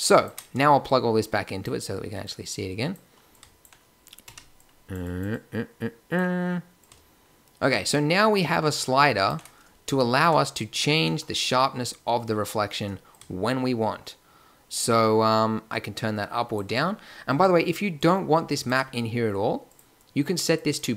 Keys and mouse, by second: 0.8-1.8 drag, 2.0-2.9 drag, 3.3 middle click, 8.5-10.1 middle drag, 13.6 click, 14.5 click, 16.8-18.6 drag.